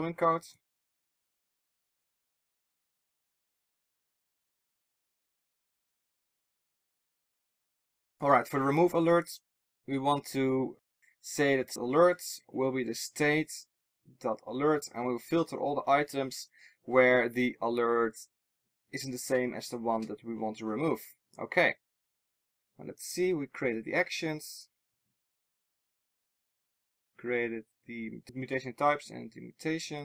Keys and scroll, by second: 2.2 Return, 6.9 alt+super+l, 26.1 super+c, 29.5 super+v.